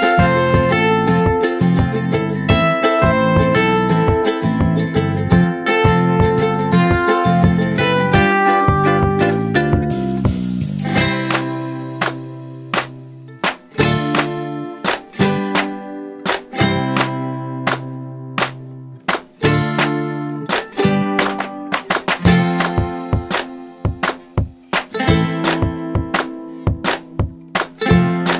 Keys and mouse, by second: 1.6-3.8 drag, 8.8 m, 11.3-12.7 drag, 13.3 right click, 15.4 click, 17.0-20.6 drag, 24.7 click, 26.9 click.